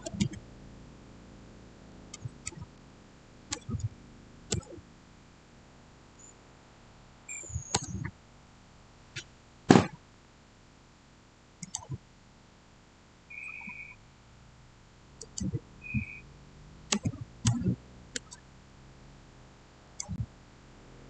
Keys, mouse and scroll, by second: 0.0-0.6 typing, 3.2-4.2 typing, 4.4 Return, 7.6 Return, 11.5 click, 15.1 click, 15.1 click, 16.9 6, 18.0 Return, 19.7 click.